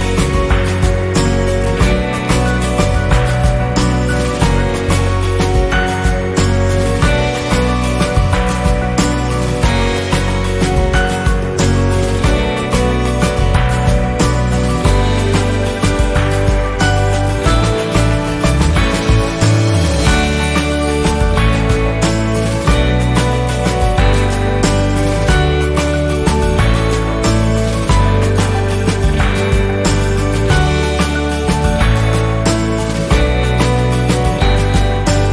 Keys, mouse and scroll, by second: 0.3 shift+click, 3.0 F10, 3.3 click, 3.3 click, 3.9 Delete, 5.3 click, 6.6 Delete, 7.4 ctrl+a, 8.3 click, 9.9 F10, 10.8-13.5 drag, 13.5 Left, 15.4-15.9 shift+scroll down 1, 17.2 z, 17.6-18.9 drag, 20.6 F7, 21.4-23.5 drag, 23.8 z, 24.2-26.2 drag.